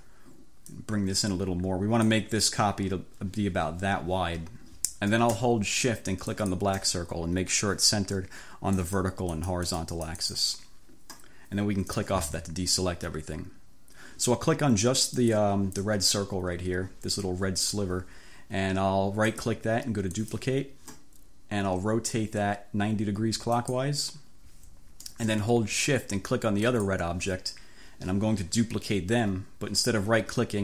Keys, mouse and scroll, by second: 0.8-2.4 drag, 6.4 shift+click, 8.8 click, 9.5-10.6 drag, 12.0 click, 15.1 click, 20.3 click, 23.6-24.0 scroll up 2, 26.7-27.1 shift+scroll up 2.